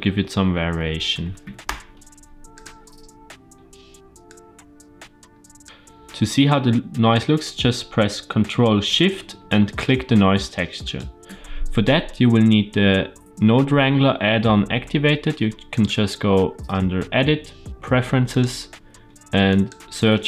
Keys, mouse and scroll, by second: 4.2-5.6 drag, 5.6 ctrl+t, 5.6 ctrl+z, 10.8 ctrl+shift+click, 15.6-18.8 drag.